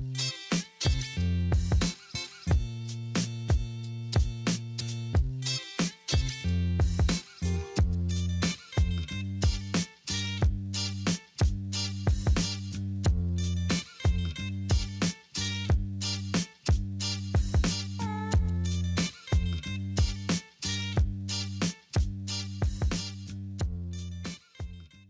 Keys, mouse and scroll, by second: 0.3 8, 0.5 Return, 4.3 double click, 9.0 5, 10.7 double click, 10.8 double click, 11.3-12.3 typing, 15.3 double click, 16.4 double click, 16.5 double click, 17.2 2, 17.3 Return, 19.2 double click, 19.6 double click, 20.0 double click, 20.5 double click, 20.9 double click.